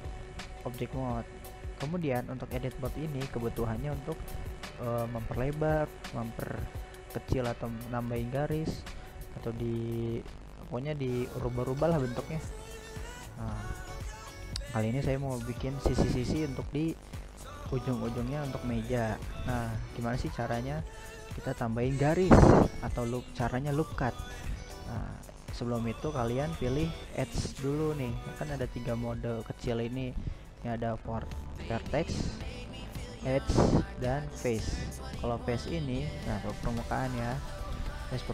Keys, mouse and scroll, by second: 0.3 right click, 0.6-2.5 middle drag, 2.5-4.3 scroll up 1, 4.3 middle click, 4.9-5.3 scroll up 2, 5.3 middle click, 6.0 scroll down 2, 6.4-8.9 middle drag, 8.9-9.6 scroll up 1, 9.6 scroll down 1, 9.8-10.3 scroll up 1, 10.3-16.3 shift+middle drag, 16.3-16.6 scroll up 2, 16.6-21.3 middle drag, 23.6 click, 24.3-25.1 drag, 25.3 click, 25.6 click, 26.1 click, 28.0-29.6 drag, 30.6 click, 31.6 right click, 32.2 right click, 32.6 right click, 32.9 middle click, 33.4 right click, 33.9 right click, 35.0 right click, 35.5 right click, 36.5 click, 37.4-38.0 right drag, 38.0-38.3 shift+middle drag.